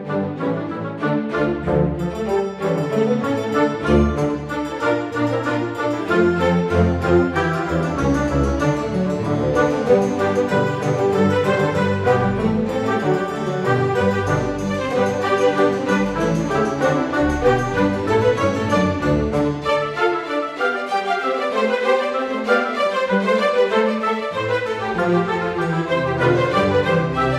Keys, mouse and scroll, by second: 0.7 click, 1.5-2.7 drag, 3.0 click, 3.3 scroll down 1, 3.6-3.9 scroll up 1, 4.3-6.1 drag, 6.5 click, 6.9-7.4 scroll down 2, 8.0-8.4 right drag, 8.7 click, 9.0-10.6 right drag, 10.8 click, 11.0-11.3 scroll up 2, 11.3 click, 11.9-13.1 drag, 13.3 scroll down 1, 13.5-13.9 scroll up 2, 14.3 click, 14.9-15.2 scroll up 1, 15.8 s, 18.0-20.3 drag, 20.4 click, 20.6 scroll down 2, 20.8-21.2 scroll up 1, 21.3-22.9 drag, 23.3 click, 23.7 scroll down 1, 24.0-24.3 scroll up 1, 24.6 scroll up 1.